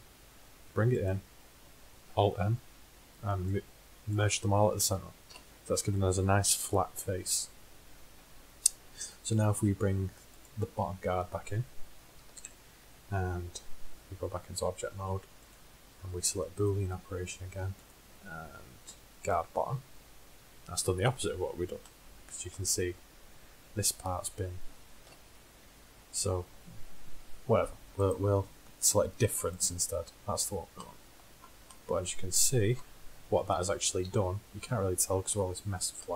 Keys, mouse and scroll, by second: 2.3 alt+m, 5.3 KP_1, 11.5 click, 12.3-14.1 middle drag, 14.1 Tab, 14.1 z, 17.9-21.4 drag, 25.1 KP_1, 28.0 click, 28.7-30.1 drag, 31.9-34.0 middle drag, 34.0 z, 34.4 z.